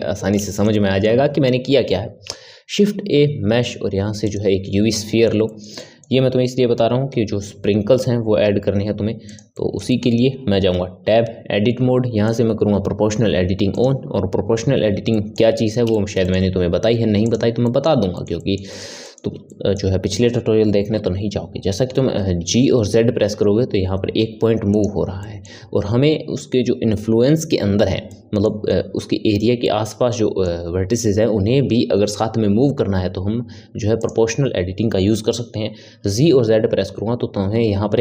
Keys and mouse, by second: 2.3 shift+a, 4.9-6.9 middle drag, 6.9 g, 9.5-10.7 middle drag, 10.7 Tab, 12.2 click, 13.7 click, 15.1-17.2 middle drag, 17.2 click, 17.6-22.3 middle drag, 22.3 g, 25.2-32.6 middle drag, 34.0 click, 35.8 g.